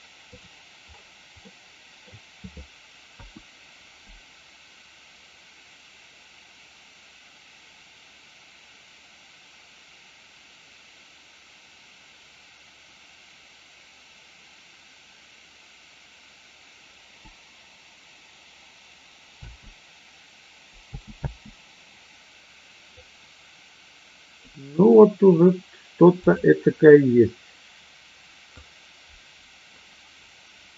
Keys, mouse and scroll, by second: 1.5 middle click, 19.4 space, 23.1-24.3 drag, 28.6-30.7 drag.